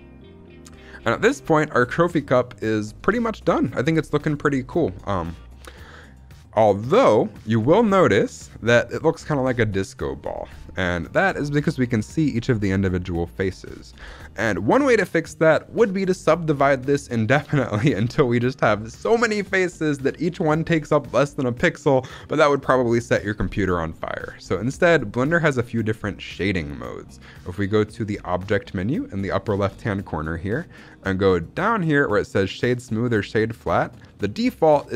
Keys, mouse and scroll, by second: 1.1 scroll up 1, 1.4-1.7 shift+middle drag, 2.5 scroll down 1, 3.0-4.2 shift+middle drag, 8.6-9.6 scroll up 1, 9.8 shift+middle drag, 10.1-10.4 scroll up 3, 10.5 shift+middle drag, 11.3-12.8 shift+middle drag, 12.8-13.3 scroll up 2, 13.5-14.0 scroll down 3, 14.1 shift+middle drag, 14.3 scroll up 2, 29.6-34.9 drag.